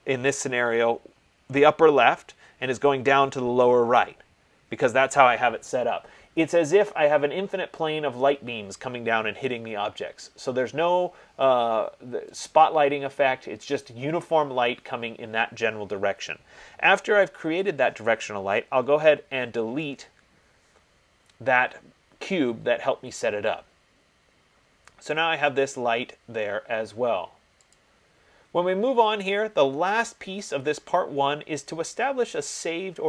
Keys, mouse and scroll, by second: 12.7-18.9 drag, 20.0 BackSpace, 28.0-33.0 drag.